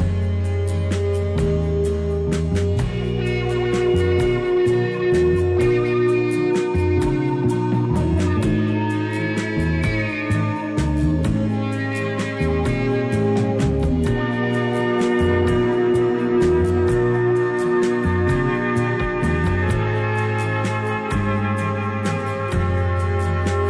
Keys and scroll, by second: 7.6 i.